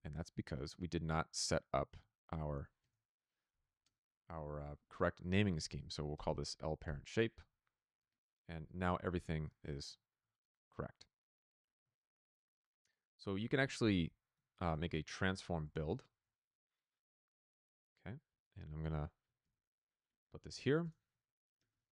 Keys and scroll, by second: 1.8 ctrl+c, 5.3-6.2 typing, 6.7 Return, 11.9 ctrl+z, 14.2 Tab, 14.4-16.3 typing, 19.3 ctrl+c, 20.3 ctrl+v, 21.1-21.9 typing.